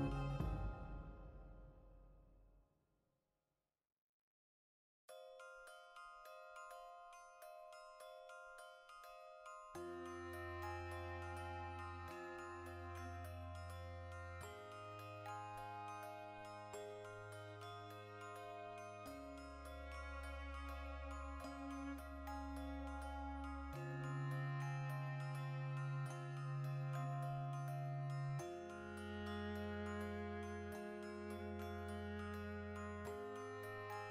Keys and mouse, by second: 0.6 click, 0.8 ctrl+r, 1.0 right click, 1.3-2.9 middle drag, 2.4 Tab, 2.9 ctrl+2, 3.7 Tab, 4.2 ctrl+r, 4.8 right click, 5.1 ctrl+b, 5.9 click, 6.1 middle click, 6.8 right click, 7.0 l, 7.2 x, 7.6 Tab, 8.2 shift+right click, 8.6 ctrl+l, 9.8 middle click, 10.0 right click, 10.2-12.4 middle drag, 11.5 Tab, 12.2 3, 12.4 right click, 12.9 ctrl+middle click, 13.4-15.0 ctrl+right drag, 15.0-17.0 ctrl+shift+middle drag, 15.9 alt+e, 17.0 click, 17.4 ctrl+z, 17.7-20.8 shift+middle drag, 20.8 shift+right click, 21.3 shift+d, 21.7-24.3 ctrl+middle drag, 22.2 alt+e, 23.5 click, 24.3 click, 24.9 middle click, 25.4 ctrl+r, 25.7 right click, 25.9 ctrl+b, 26.9 click, 27.1-28.5 middle drag, 27.4 ctrl+r, 28.5 click, 28.6 ctrl+r, 29.3 click, 29.3-30.3 middle drag, 29.7 ctrl+r, 30.3 click, 30.4-34.1 middle drag, 30.8 ctrl+r, 31.4 click, 31.8 Tab.